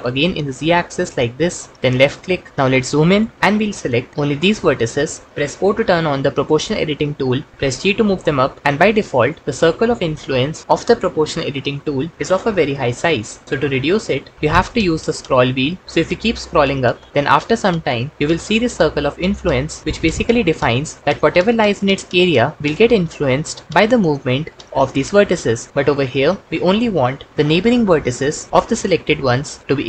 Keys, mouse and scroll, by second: 4.1 Escape, 5.8 o, 7.7 g.